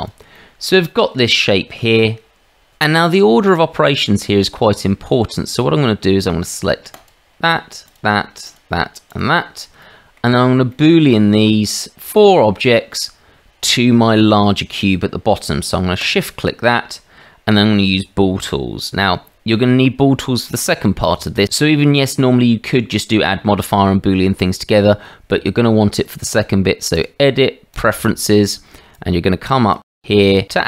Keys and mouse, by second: 0.0 click, 0.4-1.1 middle drag, 1.4-1.8 shift+middle drag, 2.1-2.7 middle drag, 4.0-4.9 middle drag, 5.3 shift+middle click, 9.1 shift+click, 9.8-10.1 middle drag, 10.7 shift+drag, 16.0 shift+click, 27.1-28.0 drag.